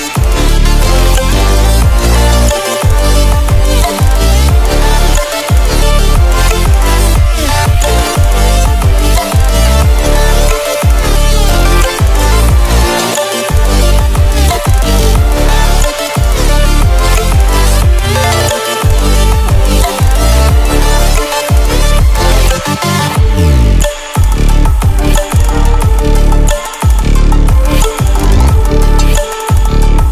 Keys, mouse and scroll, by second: 0.1-0.5 ctrl+alt+scroll down 1, 0.5-1.3 ctrl+alt+scroll up 2, 1.3 ctrl+alt+scroll down 1, 3.5-4.1 click, 13.1 click, 21.0 click, 26.7 click.